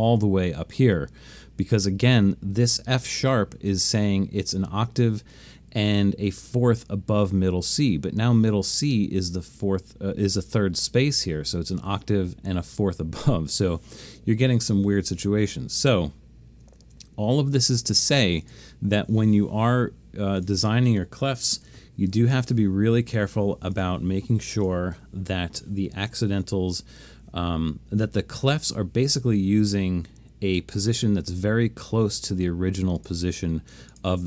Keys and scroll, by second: 16.8 alt+super+a, 21.3-22.2 typing.